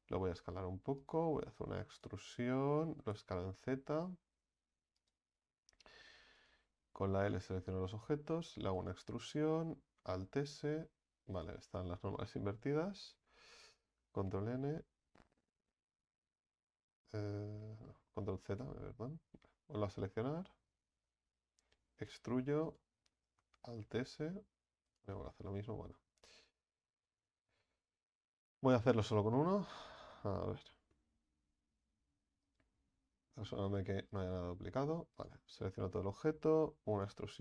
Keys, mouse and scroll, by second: 0.2 s, 1.8 e, 2.9 s, 6.4 right click, 6.8 l, 7.6 l, 8.7 e, 9.8 alt+s, 14.2 ctrl+n, 17.8 ctrl+z, 18.1 ctrl+z, 18.5 ctrl+z, 20.7 l, 22.0 e, 23.7 alt+s, 25.2 ctrl+z, 25.5 ctrl+z, 26.0 ctrl+z, 26.3 ctrl+z, 27.5 right click, 29.5 click, 29.8 a, 30.0 a, 32.6 w, 33.7 right click, 34.1 alt+shift+right click, 35.2 right click, 35.8 l, 36.8 e.